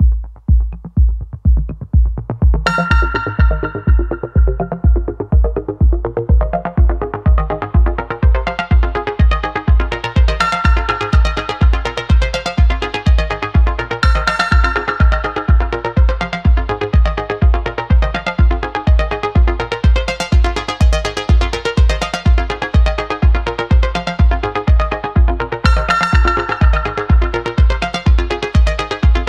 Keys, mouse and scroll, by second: 0.0 ctrl+z, 1.6-2.8 drag, 3.5 alt+r, 7.4-8.4 drag, 9.1-11.9 drag, 12.6 alt+g, 13.7 click, 14.5-15.5 drag, 15.5-17.1 right drag, 19.2 alt+r, 20.2 click, 21.1-26.7 drag, 27.5 alt+r, 28.4 click.